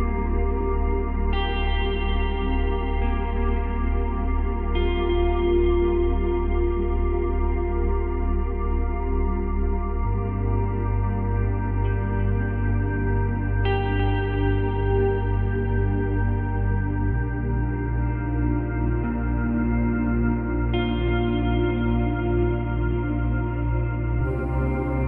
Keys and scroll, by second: 7.9 Delete, 13.4 ctrl+c, 13.9 ctrl+v, 24.5 Delete.